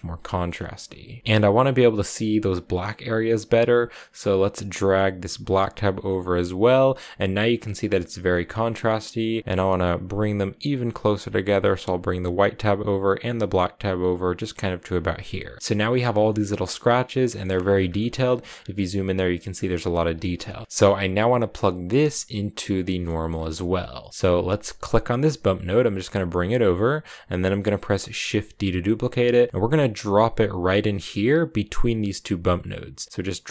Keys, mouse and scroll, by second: 0.1 shift+middle click, 0.3 scroll up 2, 1.2-2.8 scroll up 1, 4.5-7.4 drag, 7.4 scroll down 3, 8.1 middle click, 8.3 scroll up 2, 9.3-15.6 drag, 15.6 scroll up 5, 15.6-16.1 scroll down 7, 16.1-17.3 shift+middle drag, 17.3-18.4 scroll up 12, 17.8 shift+middle click, 19.3-20.6 scroll down 15, 20.0 shift+middle click, 20.6 middle click, 20.7-22.9 drag, 22.9 middle click, 23.1-23.6 scroll up 4, 23.6 middle click, 24.0-24.4 scroll down 2, 24.4 click, 28.2 shift+d.